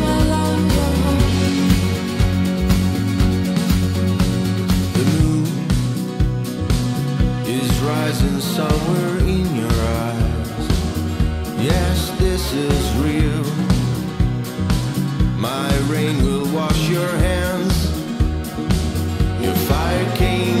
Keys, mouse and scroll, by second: 3.1-8.3 drag, 8.3 right click, 9.1-11.6 drag, 12.4-16.4 drag, 16.4-16.9 scroll up 1, 16.9 middle click, 16.9-17.4 scroll, 17.7-20.6 drag.